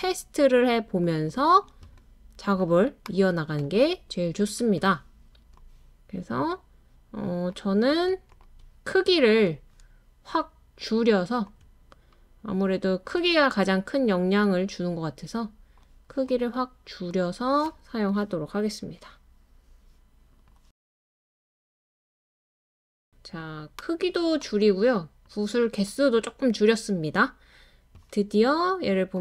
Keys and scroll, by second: 5.4 space, 7.2 BackSpace, 14.6 BackSpace, 23.1 space.